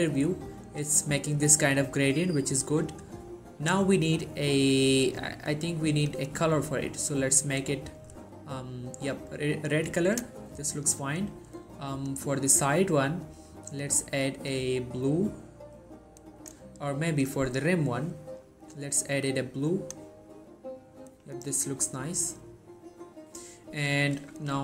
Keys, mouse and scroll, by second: 6.2-10.3 drag, 16.5 right click, 17.2-20.3 drag.